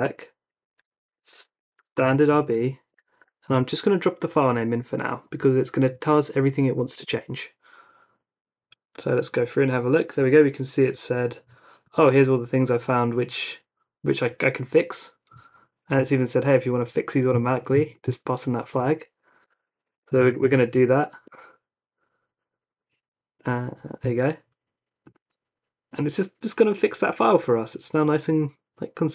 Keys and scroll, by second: 0.0-2.9 typing, 3.5 super+v, 7.0 Return, 18.9 Up, 19.4-20.9 typing, 21.2 Return.